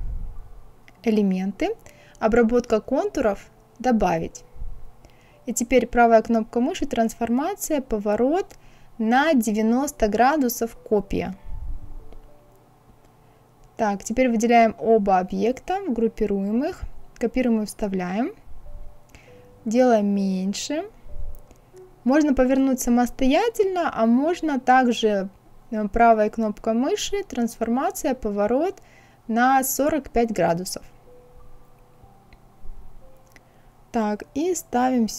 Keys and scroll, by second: 16.7 ctrl+c, 17.5 ctrl+f, 24.9 ctrl+z, 29.6 KP_4, 29.9 KP_5.